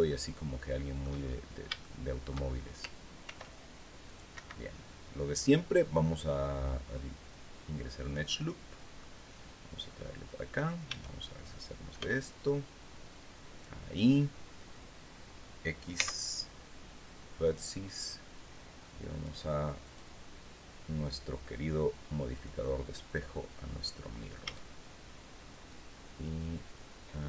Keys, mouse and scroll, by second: 0.7-1.1 shift+scroll up 3, 1.3 shift+middle click, 2.7 ctrl+r, 3.6 click, 3.8 Escape, 7.5 click, 8.5-10.0 middle drag, 10.4 a, 11.5 b, 12.0-13.3 drag, 15.5 x, 16.9 click, 18.7 click, 19.3 click, 21.8 click, 23.9 a, 25.2-27.2 drag.